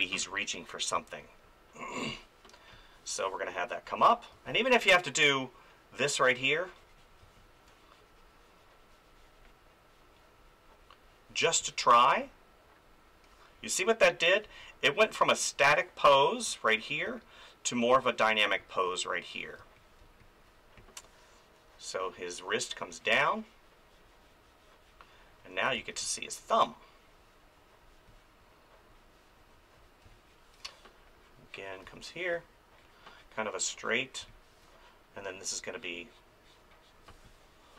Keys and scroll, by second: 0.9 space, 4.3 space, 7.2 space, 11.4 space, 17.0 ctrl+z, 18.6 space, 19.6 space, 25.8 space, 30.0 space, 31.8 space, 34.2 space, 37.1 space.